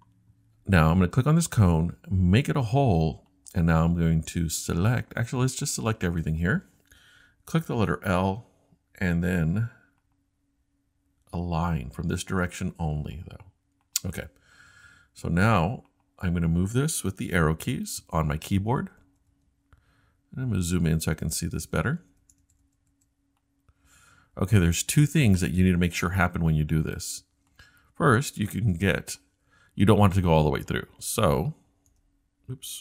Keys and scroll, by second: 7.7 i, 18.8-19.2 typing, 21.4-21.8 typing, 22.9 BackSpace, 24.3-24.7 typing, 28.6 BackSpace, 28.9-29.3 scroll up 2, 31.9-32.8 scroll down 1.